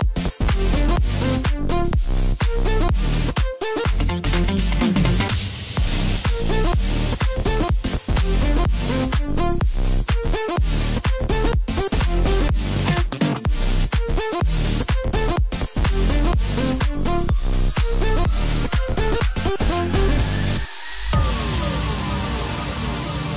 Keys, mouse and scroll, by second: 1.7 click, 3.8 Tab, 4.9 e, 8.0-10.2 middle drag, 10.2 g, 13.1 click, 14.2 ctrl+z, 15.1 g, 17.8 middle click, 18.7 scroll up 1, 19.4 Tab, 20.1 click, 21.5 click.